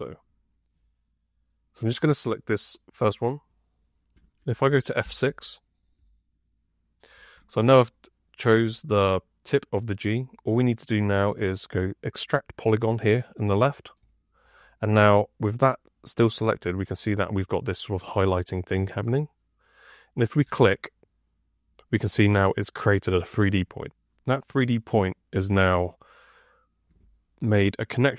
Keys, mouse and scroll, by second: 4.9 F6.